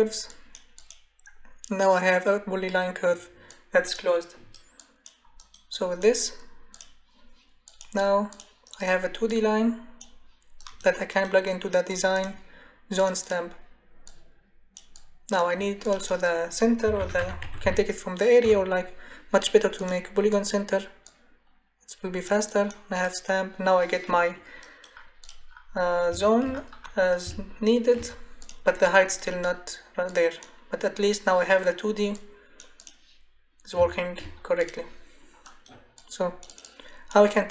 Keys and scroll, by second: 16.6-18.4 typing.